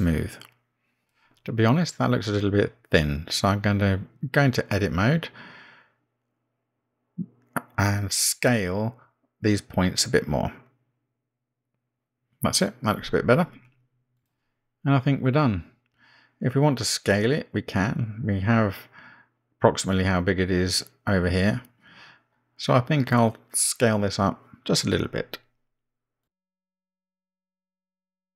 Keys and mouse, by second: 2.5 click, 2.6 click, 3.7-4.1 middle drag, 4.6-4.9 shift+middle drag, 7.0 Tab, 9.6 s, 12.9 Tab, 14.0 click, 14.9-16.3 middle drag, 18.5 click, 26.1 s.